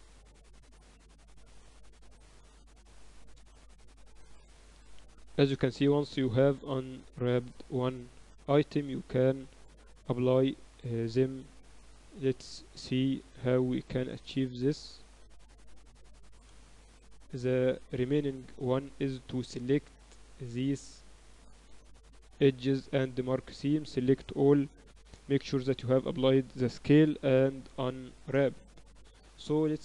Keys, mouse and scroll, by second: 0.0-1.2 typing, 2.0-10.3 middle drag, 6.1-7.9 drag, 10.3-12.3 drag, 11.1 ctrl+e, 12.3 middle click, 14.5 KP_6, 14.8 KP_6, 14.9 KP_6, 15.2 KP_6, 18.1 shift+b, 20.6 click, 21.2 a, 24.5 ctrl+e, 24.7 a, 24.9 a, 25.7 Tab, 26.1 ctrl+a, 27.2 Tab, 27.6 a, 27.8 a, 28.9 u.